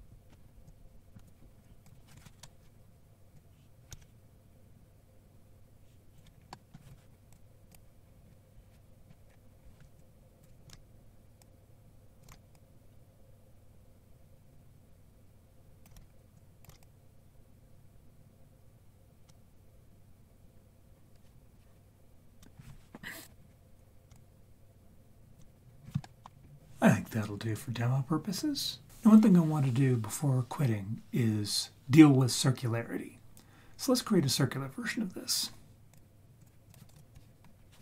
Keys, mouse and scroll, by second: 0.7 click, 1.8 click, 3.4-6.2 drag, 6.3-6.7 scroll down 4, 6.5 middle drag, 7.3 click, 9.3-9.9 scroll up 1, 9.9 click, 9.9 scroll up 1, 10.7 ctrl+z, 11.4 click, 12.3 ctrl+z, 12.5-15.8 drag, 15.9 ctrl+z, 16.4 click, 16.7 ctrl+z, 16.8-22.4 drag, 23.2 ctrl+z, 24.1-25.4 shift+drag, 26.0 middle drag, 26.2-27.3 scroll down 3, 26.4-27.3 scroll up 1, 27.3-28.4 scroll up 1, 35.9-36.4 drag, 36.9 KP_7, 37.5-37.8 scroll down 3.